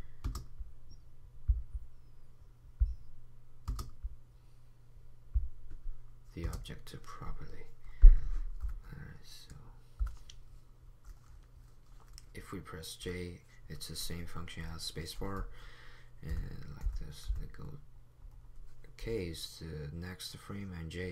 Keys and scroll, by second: 8.6 p, 9.4 p, 10.0 p, 11.4 p, 16.3-17.4 typing.